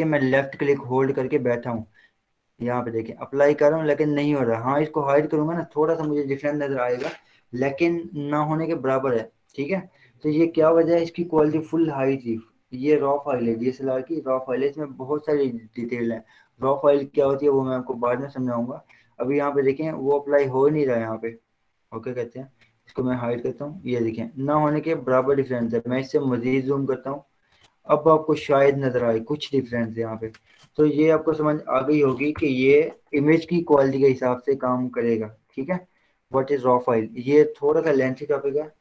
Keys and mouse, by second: 7.7 v, 17.4 v, 17.8 v, 22.2 click, 24.1 click, 25.8 z, 26.9-28.6 drag, 31.5 ctrl+0, 31.9 ctrl+w, 32.2 Down, 32.5 Return, 34.1 click, 35.4-38.1 drag.